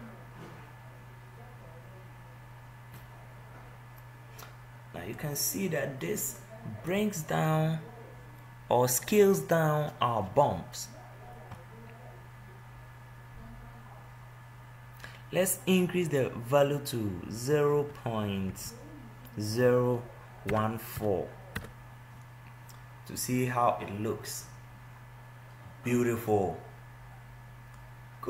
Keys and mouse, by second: 1.7 0.